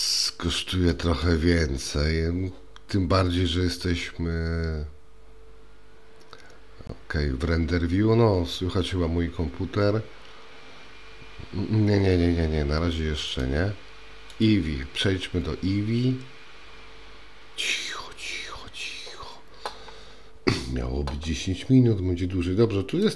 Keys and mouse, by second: 14.5 click.